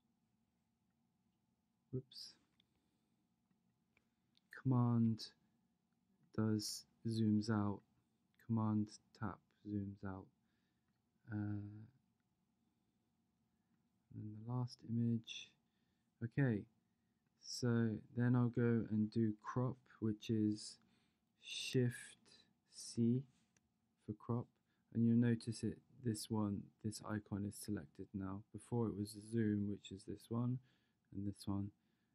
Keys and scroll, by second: 23.0 shift+c.